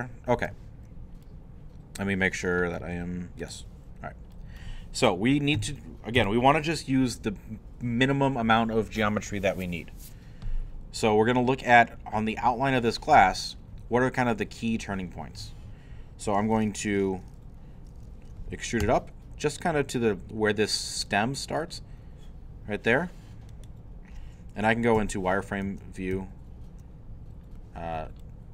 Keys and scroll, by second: 2.8 g, 5.6 3, 6.2 i, 18.8 e, 25.0 z.